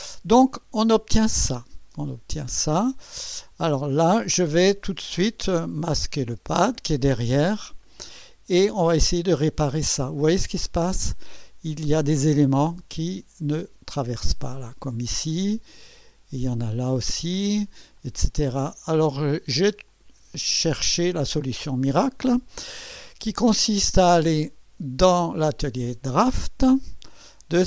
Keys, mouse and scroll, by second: 5.9 click, 6.4 space, 7.2-10.6 drag, 10.7 scroll up 2, 11.3 right click, 12.2-14.6 drag, 15.3-17.0 drag, 18.0-19.5 drag, 19.9-21.3 drag, 24.4 click, 25.7 click.